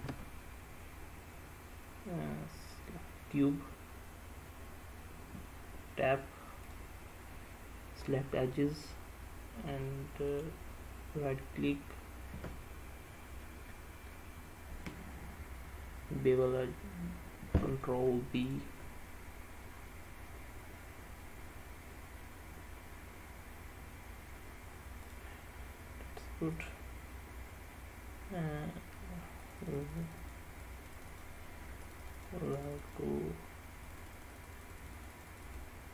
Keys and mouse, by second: 5.5 Tab, 6.8 click, 10.5-18.8 right drag, 25.1 click, 29.5-30.5 drag, 30.7 click, 31.1 click, 31.9 click, 32.6 click, 32.9 click, 33.9 click.